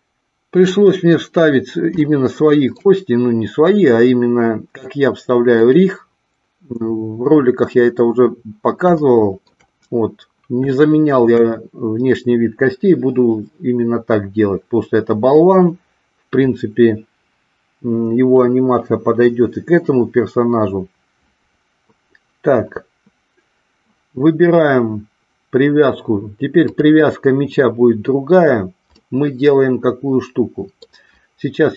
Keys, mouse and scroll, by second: 2.1-2.7 shift+middle drag, 9.0-9.5 shift+middle drag, 10.9 shift+middle click, 26.6 click, 29.0-30.7 middle drag.